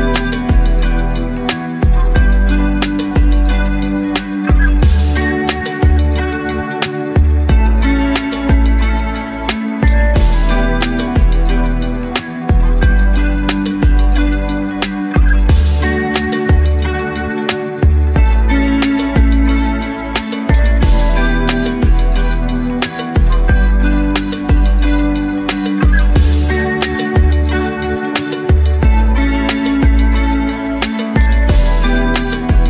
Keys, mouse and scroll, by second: 1.2 alt+middle click, 1.2 alt+scroll down 1, 1.5 middle click, 1.8 alt+click, 2.2 scroll up 2, 2.5 alt+middle click, 2.9 scroll up 2, 3.3 alt+middle click, 3.7 scroll down 1, 4.0 alt+middle click, 4.3 scroll down 2, 4.6 alt+click, 5.2 scroll down 1, 5.4-7.0 alt+drag, 7.2 scroll up 2, 7.4 alt+middle click, 7.9 shift+right click, 9.1 click, 9.9 click, 10.6-13.6 drag, 13.9 alt+click, 14.9 scroll up 2, 15.1 alt+click, 16.2 shift+right click, 17.4-17.8 scroll down 7, 17.9-19.0 alt+drag, 19.2-20.2 scroll up 4, 20.3 alt+middle click, 20.6 scroll up 1, 20.8-21.3 alt+drag, 21.4-21.8 scroll down 2, 21.9 alt+middle click, 22.3 alt+click, 22.7 alt+middle click, 26.7 click, 28.2 click, 29.0-30.4 drag, 31.6 click, 32.0 scroll down 1.